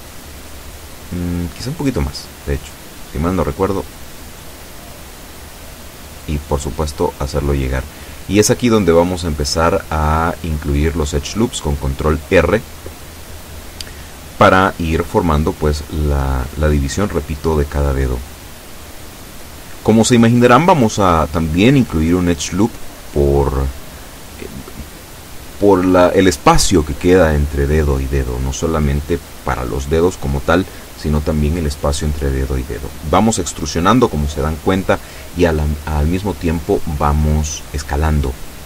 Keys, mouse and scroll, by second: 0.4 click, 1.8 a, 2.7 b, 2.8 click, 3.9 click, 5.2-6.3 drag, 9.8 ctrl+r, 10.3 click, 12.9 click, 13.6 a, 13.9 b, 14.3 click, 15.4-16.7 drag, 17.3-19.1 drag, 19.6 click, 23.2-24.2 shift+middle drag, 24.2 shift+scroll up 2, 24.3 shift+middle click, 25.7 b, 25.9-27.0 drag, 27.7 e, 29.5 click, 30.3 s, 31.3 click, 32.0 a, 32.3 b, 33.0 click, 34.1-35.1 drag, 35.9 b, 36.3 click, 38.4 a.